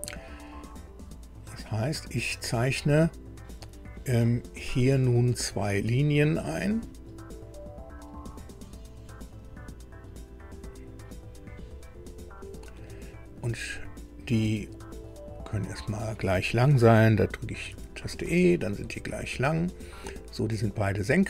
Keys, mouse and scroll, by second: 1.8 click, 6.7 click, 8.0 click, 9.3 click, 10.5 click, 12.3 click, 12.9 right click, 14.8 click, 15.6 click, 17.7 e.